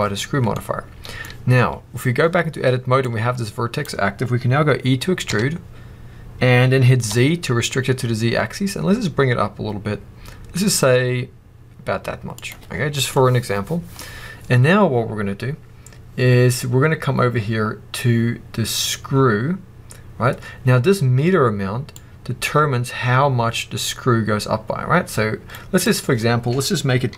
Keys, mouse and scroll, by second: 0.4 middle click, 1.2-2.9 scroll up 1, 2.9 click, 5.2 e, 12.4 click, 12.8 scroll down 1, 13.0 middle click, 13.9 scroll up 2, 21.9-27.1 drag.